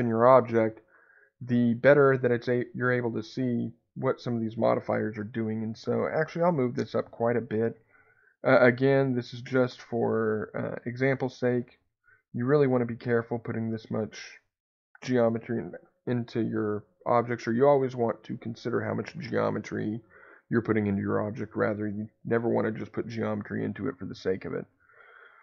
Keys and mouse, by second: 6.6-10.6 drag, 8.3 BackSpace, 11.5 click, 12.6-16.4 middle drag.